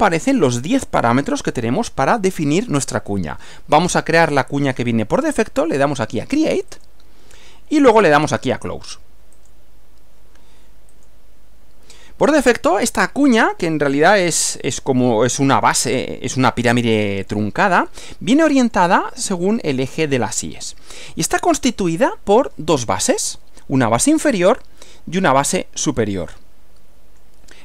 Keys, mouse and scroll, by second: 6.8 click, 9.5 click, 11.0 click, 14.1-15.3 middle drag, 15.6-17.5 middle drag, 17.9-19.0 middle drag, 19.3-21.8 middle drag, 21.9 middle click, 24.7 middle click, 26.3-27.5 middle drag.